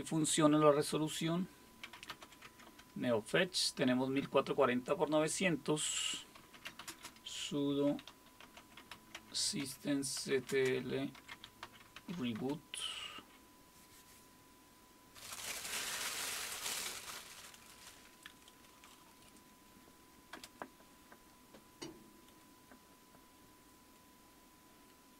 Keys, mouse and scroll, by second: 1.6-2.7 typing, 6.1-12.6 typing, 20.3 Return.